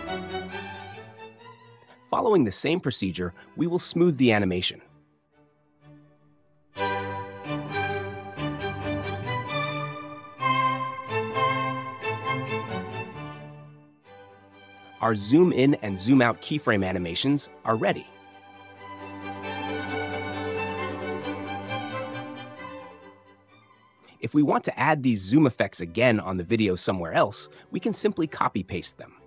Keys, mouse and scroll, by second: 1.8 click, 3.3 space, 4.5 space, 5.7 click, 6.2 right click, 7.5 click, 9.1 click, 10.1 click, 10.9 click, 11.9 click, 12.7 click, 13.3 click, 13.6 right click, 14.4 click, 15.7 click, 17.0 space, 21.0 space, 22.4 click.